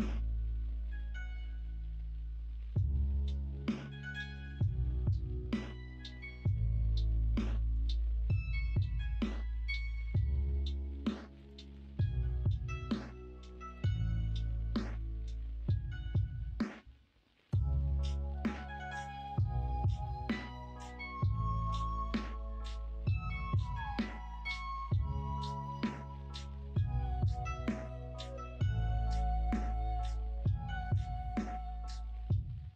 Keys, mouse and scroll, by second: 5.3 middle click, 6.9 shift+Tab, 8.4 middle click, 9.0 s, 9.9 ctrl+z, 11.4-12.4 drag, 13.0 s, 13.8 ctrl+z, 14.9 middle click, 16.3-18.7 middle drag, 19.6 middle click, 22.0 alt+click, 24.2 alt+shift+click, 26.2 middle click, 27.3 alt+z, 27.9 alt+z, 28.2 middle click, 28.7 middle click, 31.7 middle click.